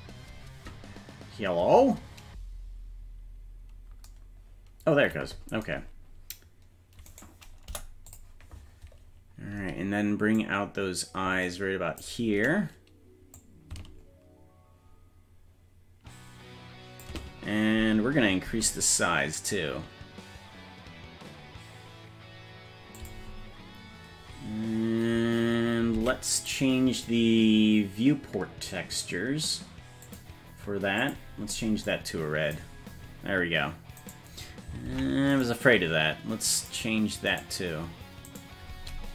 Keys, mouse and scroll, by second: 7.1 right click, 7.7 Delete, 8.9-9.5 scroll up 4, 10.4-12.0 drag, 13.5-17.1 drag, 26.0 ctrl+Tab, 26.4 right click, 30.1 click, 31.0 click, 34.1 right click, 34.9 ctrl+Tab, 35.5 right click, 36.7 right click, 38.4 right click.